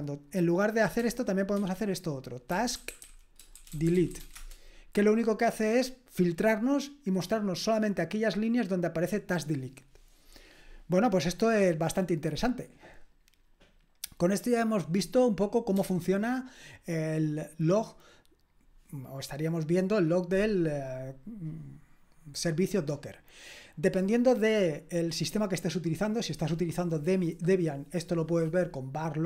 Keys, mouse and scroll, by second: 1.6-4.7 typing, 15.8 typing.